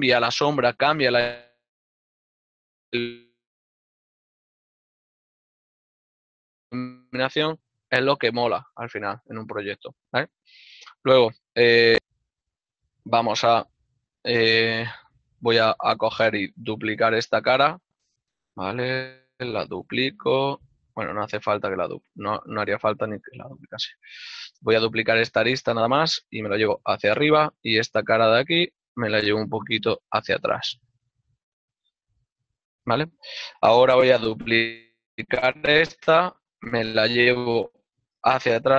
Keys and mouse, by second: 9.6 shift+middle click, 14.9 right click, 16.2 middle click, 18.0 right click, 19.2 shift+d, 21.6 right click, 23.1 click, 23.4 right click, 23.9 ctrl+middle click, 27.6 e, 28.1 ctrl+click, 29.0 right click, 29.4 g, 32.3 ctrl+middle click.